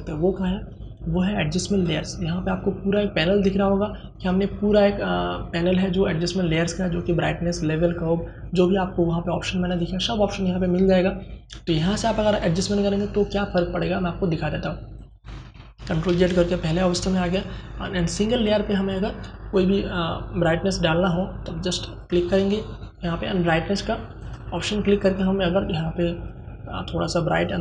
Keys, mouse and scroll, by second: 1.0 click, 14.2 click, 15.4 ctrl+alt+z, 21.1 click, 23.5-27.6 drag.